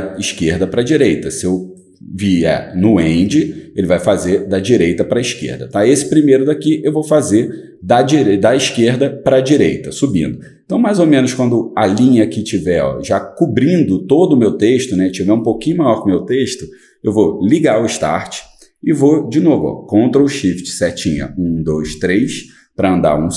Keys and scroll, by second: 21.1 ctrl+shift+Right, 21.5 ctrl+shift+Right.